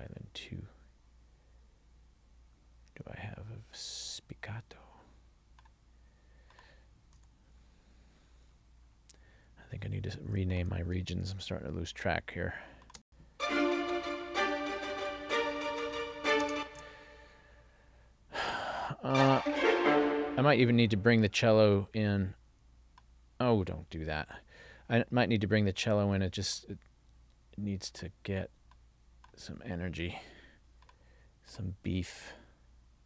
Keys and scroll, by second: 13.1 space, 16.6 space, 24.4 super+z.